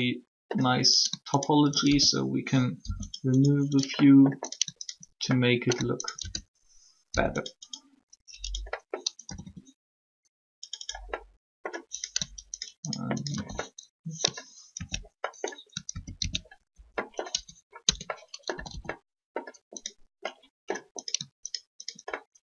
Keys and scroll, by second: 2.7 shift+0, 7.1 shift+0, 9.2 typing, 17.3 ctrl+Tab, 17.8 Tab, 18.5 typing.